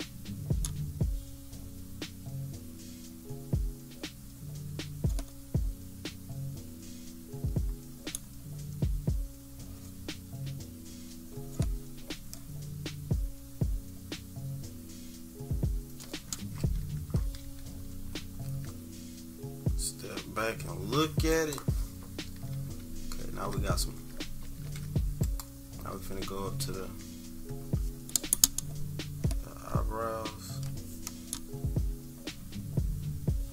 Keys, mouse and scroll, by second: 2.3 click, 4.3 click, 6.9 click, 10.5 click, 14.6 click, 17.2 -, 17.4 -, 17.7-18.2 scroll up 2, 17.7 -, 17.9 -, 21.3 click, 22.1-23.3 typing, 24.5 =, 25.2 click, 26.0 -, 26.5-27.0 scroll up 4, 26.8 =, 27.8 scroll up 2, 29.7 click, 30.7 click, 31.6 click, 32.3 click, 32.9 click.